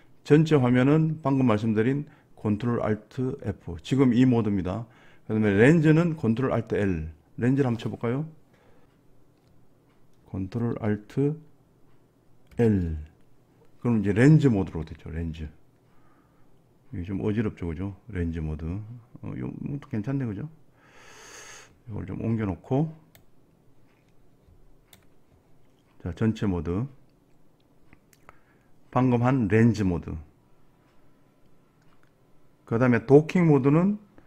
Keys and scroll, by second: 12.6 ctrl+alt+l.